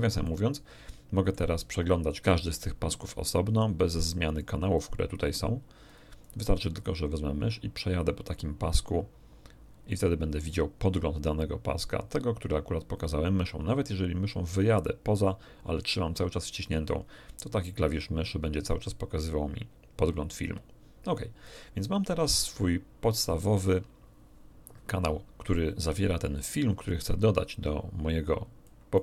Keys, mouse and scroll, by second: 0.2-1.5 ctrl+middle drag, 4.4 click, 4.7 click, 5.8 click, 6.2 click, 7.8-10.0 drag, 10.4-21.6 drag, 22.4-23.6 drag, 26.8-28.8 drag, 28.9 right click.